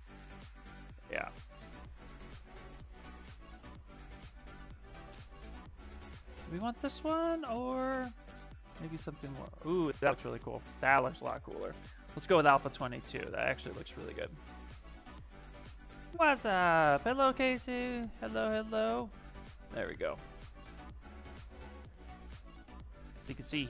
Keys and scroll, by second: 0.4 ctrl+z, 3.5 ctrl+z, 3.6 ctrl+z, 4.4 ctrl+z, 12.4 ctrl+z, 13.0 ctrl+z, 13.5 space, 15.9 s, 19.9 space.